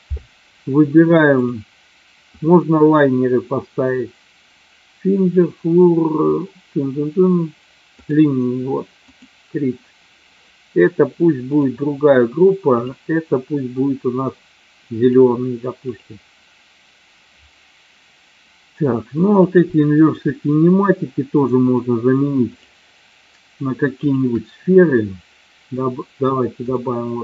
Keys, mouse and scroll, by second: 1.5-8.3 drag, 9.3 click, 12.7-15.3 drag, 16.0 click, 24.1 shift+click, 26.7-27.2 drag.